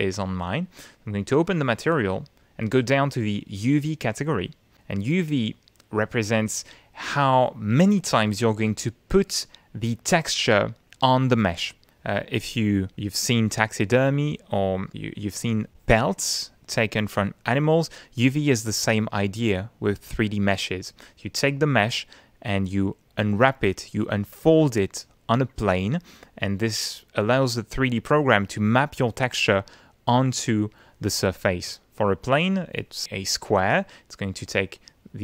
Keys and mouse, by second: 0.3 click, 1.2 click, 5.1 click, 6.4-7.7 drag.